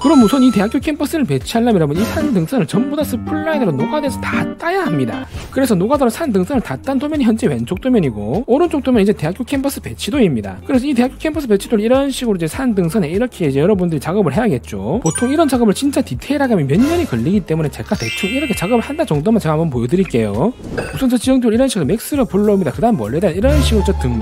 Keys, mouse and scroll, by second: 7.4 click, 8.8 click, 12.0 right click, 12.3 click, 14.2 click.